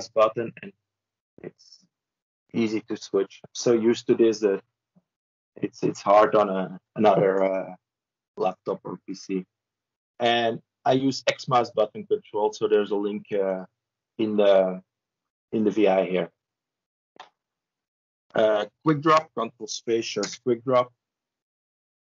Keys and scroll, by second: 0.6 ctrl+e, 19.9 ctrl+space.